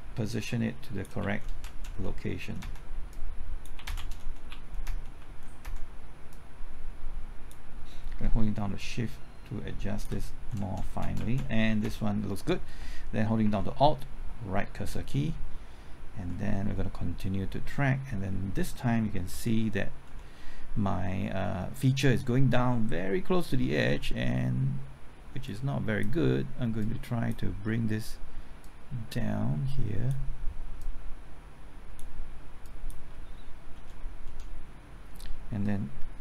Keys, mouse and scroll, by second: 1.2-2.6 typing, 1.8 Right, 3.1 click, 3.7 Left, 3.7-5.0 typing, 4.0 Right, 5.1 Left, 5.6 Right, 6.3-7.5 drag, 8.3 typing, 8.7 shift+click, 10.2 shift+Left, 10.5-11.1 typing, 11.1 Left, 11.3 Right, 11.6 Left, 11.8 Right, 14.8 alt+Right, 16.1 alt+Right, 19.3-20.0 typing, 25.4-30.5 drag, 30.5 click, 32.5 click, 33.7 Left, 34.2 typing.